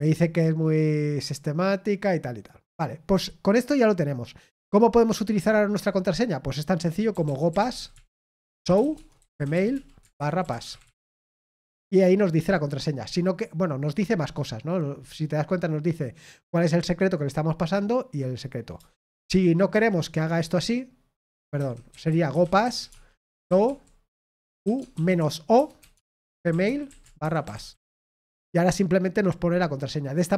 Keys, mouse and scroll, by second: 9.9-11.4 typing, 21.5 ctrl+c, 21.6-22.5 typing, 26.2-28.3 typing.